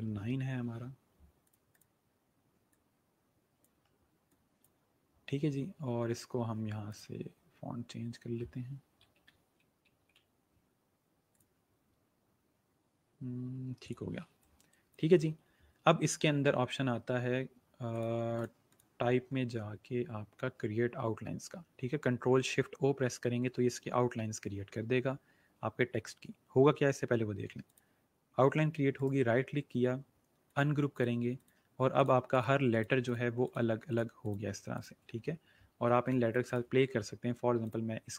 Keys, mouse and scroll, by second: 1.4 click, 8.9 m, 12.4 click, 13.8 click, 17.8 click, 27.6 click, 28.9 right click, 30.4 click, 35.5-36.0 alt+scroll up 2, 36.2 click.